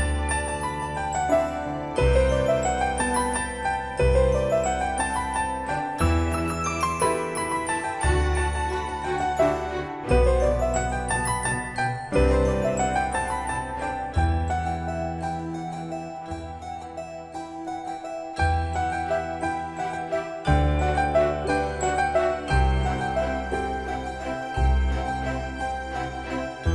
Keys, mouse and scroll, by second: 2.9 typing, 5.4-5.7 scroll up 1, 6.9-7.9 drag, 14.2 scroll down 1, 15.5 click, 16.6 right click, 18.2-19.4 scroll up 1, 20.0-20.4 scroll down 1, 25.8 |.